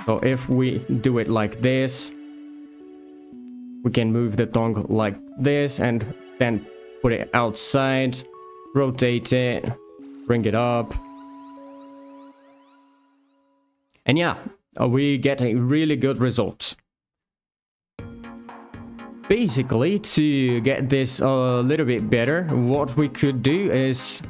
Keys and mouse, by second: 0.2 r, 0.8 click, 1.2 middle click, 2.0 r, 2.2 r, 5.0 click, 5.3 g, 6.1 click, 8.0 r, 8.3 click, 8.6 r, 8.8 r, 9.2 click, 9.7 g, 10.3 drag, 11.0 middle click, 15.2 middle drag, 17.2 z, 20.3 alt+g, 20.5 alt+r, 20.6 alt+s, 20.8 alt+a, 24.0 click.